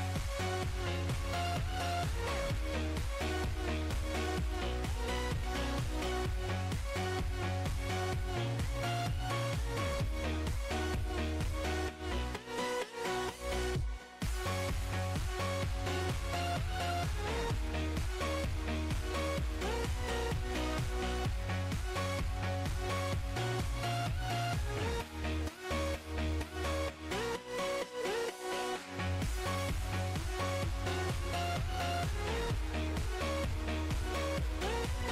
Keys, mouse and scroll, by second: 0.8 alt+g, 0.9 alt+r, 1.3 click, 1.5-3.6 drag, 3.8-5.1 drag, 5.2-5.6 middle drag, 5.6 s, 6.1 ctrl+KP_0, 6.5-7.9 drag, 8.1-8.6 drag, 8.6 KP_7, 8.9 middle drag, 9.1-9.5 scroll up 1, 9.5-10.3 drag, 10.3 KP_0, 10.7-12.0 drag, 12.6 click, 13.3 click, 13.7 click, 14.0 click, 14.3 click, 16.8 space, 17.2 click, 17.5-18.5 drag, 19.4 click, 20.3 KP_0, 20.8 click, 20.9-21.3 middle drag, 21.3 click, 21.5 middle click, 21.8 click, 22.0 s, 22.5 click, 22.7-23.7 drag, 24.4 scroll down 4, 24.6 click, 24.9 click, 25.2 KP_7, 25.9 shift+d, 28.2 r, 29.5 g, 30.6-31.7 drag, 31.7-32.2 middle drag, 32.2 click, 33.3 middle click, 33.5 shift+a, 33.9 alt+g, 34.0 alt+r, 34.4 click, 34.6 click, 34.7-35.1 drag.